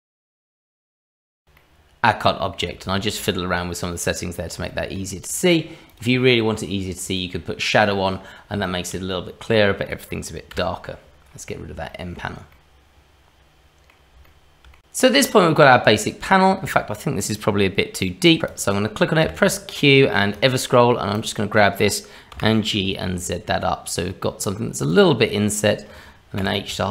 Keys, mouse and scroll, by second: 1.6 middle click, 2.9 shift+middle click, 4.1-4.6 scroll up 1, 4.7 shift+middle click, 5.9 click, 7.8-8.5 scroll down 1, 8.6 shift+middle click, 10.5 n, 11.3-11.6 scroll up 1, 11.9 shift+middle click, 12.5 middle click, 14.2 shift+middle click, 15.2 middle click, 18.4 q, 18.5 click, 19.2 q, 26.4 h, 26.7 click.